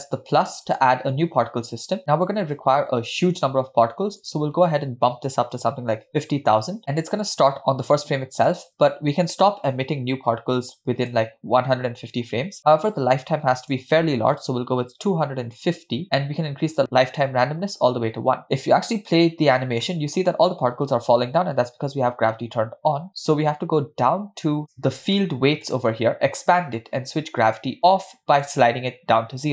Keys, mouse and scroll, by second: 0.7 click, 4.2-6.8 drag, 5.8 0, 8.5-11.1 drag, 13.7-15.8 drag, 16.8 click, 18.4-18.9 scroll down 4, 18.9 space, 19.9 middle click, 22.0 space, 25.7 click, 26.3-27.5 scroll down 2, 27.5 scroll down 1, 27.6-28.6 drag.